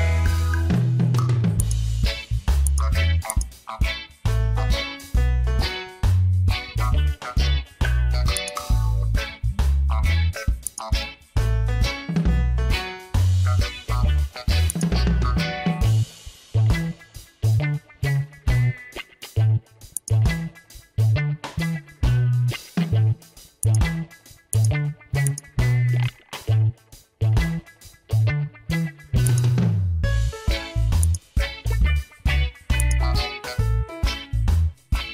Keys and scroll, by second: 10.3 Return, 19.3 ctrl+t, 21.2 Return.